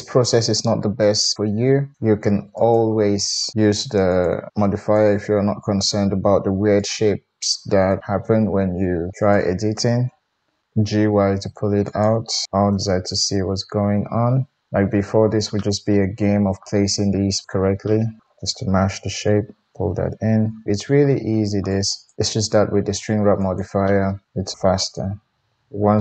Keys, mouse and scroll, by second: 2.1 ctrl+r, 3.5 g, 4.7 click, 5.8 g, 9.2 click, 10.2-12.0 drag, 11.7 g, 12.0-15.7 middle drag, 12.7 alt+z, 15.8-17.3 middle drag, 17.3-20.6 drag, 18.8 g, 20.6-21.6 middle drag, 21.6-23.6 drag, 22.1 g, 23.6-26.0 middle drag.